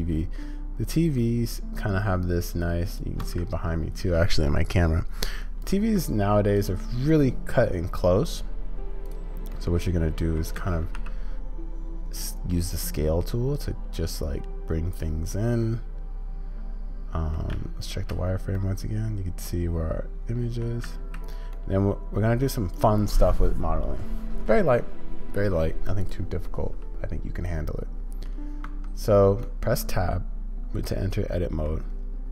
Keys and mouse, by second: 9.5 click, 15.3-17.3 drag, 18.5-20.6 middle drag, 21.5-22.4 middle drag, 26.5-28.2 middle drag, 28.7 Tab, 29.4-31.6 middle drag.